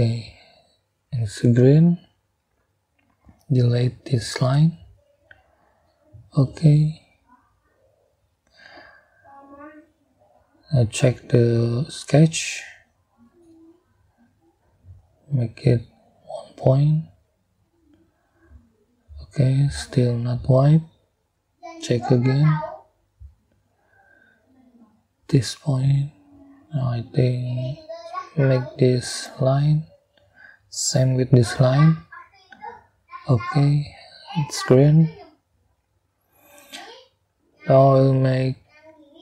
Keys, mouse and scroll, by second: 4.2 click, 5.8 Delete, 6.7 scroll down 2, 7.1 scroll up 2, 10.5-12.9 middle drag, 14.0 middle click, 15.3 middle click, 17.1 middle click, 18.7-19.9 middle drag, 21.8 middle click, 23.3 click, 25.3-28.4 drag, 30.1 click, 31.4 click, 32.8 middle click, 33.5 middle click, 35.4 middle click, 38.5 middle click.